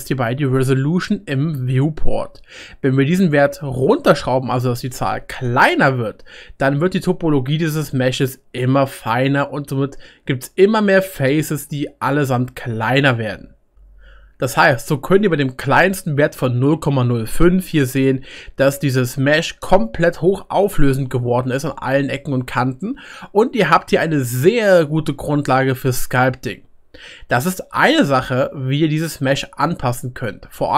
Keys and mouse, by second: 5.8 click, 12.1 middle click, 14.5-17.8 drag, 18.8-19.4 middle drag, 19.4 drag, 20.3 drag, 21.6 middle click, 25.1 middle click, 25.9-29.7 middle drag.